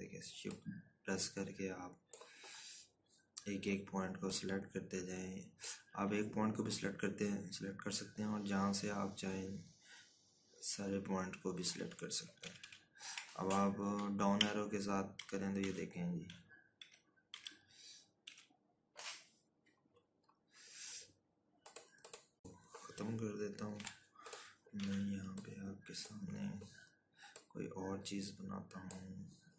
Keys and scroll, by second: 10.9 ctrl+-, 11.1 ctrl+-, 12.9 Down, 14.1 Left, 15.3 Right, 15.8 Right, 16.8 Left, 21.2 z, 26.0 Delete, 27.1 z.